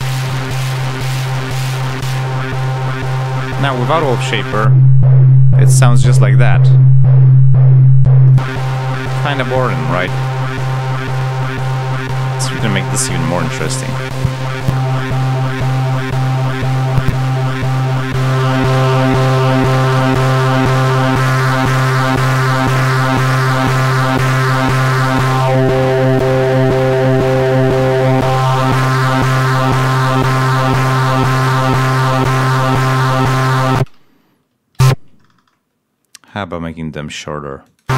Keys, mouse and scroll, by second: 1.4 click, 1.9 click, 4.4 click, 8.2 click, 11.3 click, 13.0 click, 16.8-17.9 drag, 17.6 right click, 17.9-20.0 drag, 22.0-23.1 drag, 23.9 click, 31.0 click, 32.8 click, 33.7 space, 34.0 ctrl+scroll up 2, 34.7 ctrl+a, 36.2-37.3 alt+drag, 37.6 alt+click, 37.8 space.